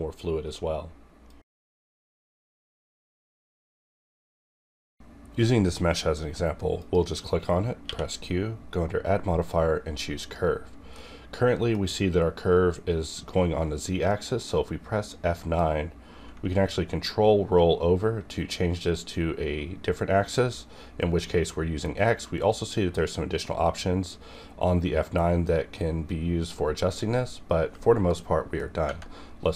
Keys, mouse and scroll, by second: 7.8 q, 10.2 click, 10.9-14.1 middle drag, 14.1 middle click, 15.3 F9, 17.1-18.9 ctrl+scroll down 2, 19.4 ctrl+Num_Lock, 19.4 ctrl+scroll down 1, 28.1 scroll down 1, 28.8 Tab, 29.5 click.